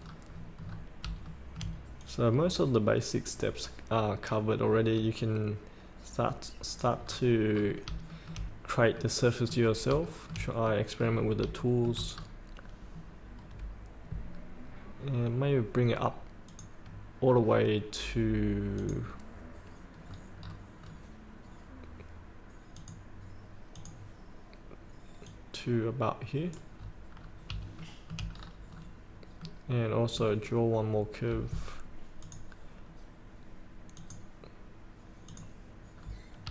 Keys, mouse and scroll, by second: 0.0 scroll down 1, 1.2 shift+middle click, 2.0-7.0 drag, 7.0 scroll up 1, 8.1 shift+middle click, 8.6 scroll up 1, 8.9 middle click, 10.2 shift+middle click, 11.6 shift+middle click, 12.2 scroll down 1, 16.5 click, 20.0 scroll down 1, 22.7 click, 26.7 scroll up 1, 27.8 shift+middle click, 28.3 scroll down 1, 29.1 scroll up 1, 29.4 middle click, 30.4 scroll down 1, 32.2 click, 35.9 scroll down 1.